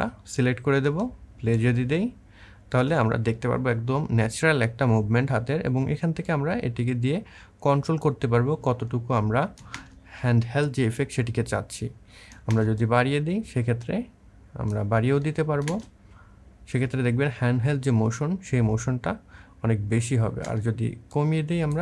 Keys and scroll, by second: 1.5 space, 9.6 space, 12.3 space, 15.5 space, 20.2 space.